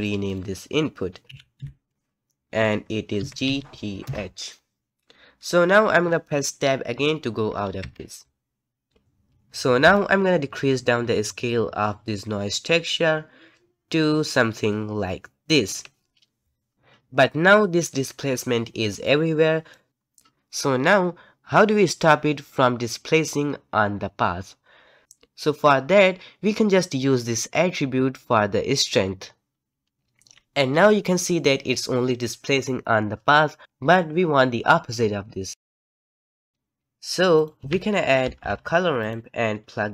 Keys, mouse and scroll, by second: 1.6 BackSpace, 7.8 Tab, 8.9 click, 9.9-19.0 shift+drag, 19.0 middle click, 35.5 click, 35.9 g, 36.3 alt+a, 38.5 o.